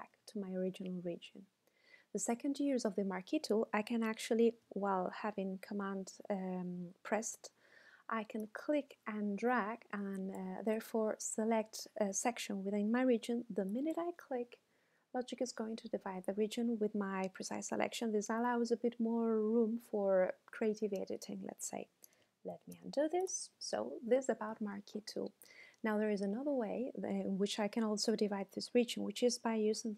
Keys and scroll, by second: 22.5 super+z.